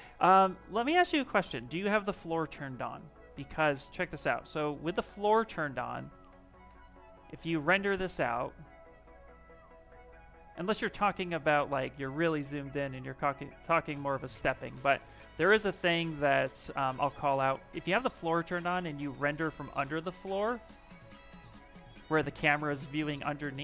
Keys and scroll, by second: 7.1 shift+r, 12.8 s, 19.7 shift+r.